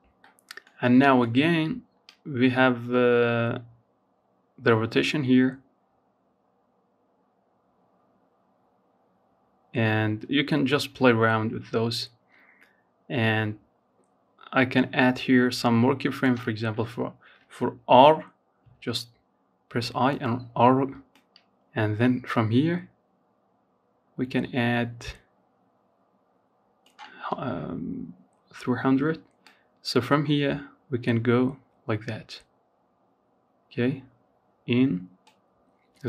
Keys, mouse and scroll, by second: 0.2-3.3 drag, 16.8 i, 19.3-22.3 drag, 27.6-30.8 drag.